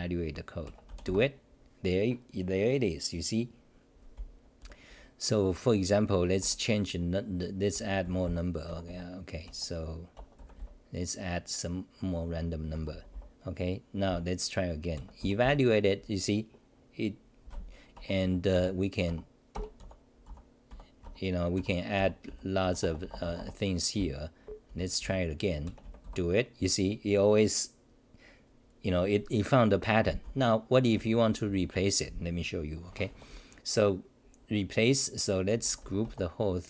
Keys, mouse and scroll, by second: 6.4 g, 8.2 c, 8.7 Home, 8.8 f, 12.7 Home, 12.9 c, 13.1 c, 14.1 h, 18.0 Home, 18.2 d, 18.5 u, 19.1 Home, 19.5 ctrl+g, 19.8 o, 20.2 Delete, 20.2 u, 21.0 Home, 21.3-25.0 typing, 30.9 d, 31.1 d, 31.6 d, 32.9 o, 35.4-36.2 typing.